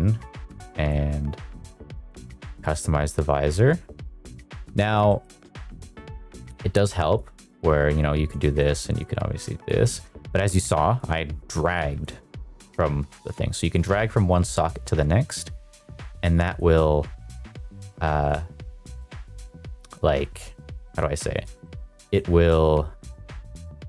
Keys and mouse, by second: 1.1-1.8 drag, 2.2 click, 5.0 middle click, 6.3 click, 8.5 click, 8.8 click, 11.0 click, 12.6 click, 13.9 click, 15.1 click, 20.1 click, 21.3 click.